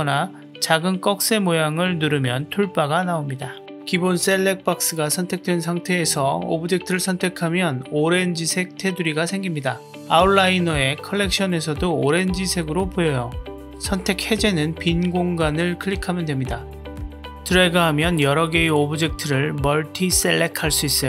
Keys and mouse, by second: 0.8 t, 2.3 click, 8.3-9.5 drag, 17.0-18.2 drag.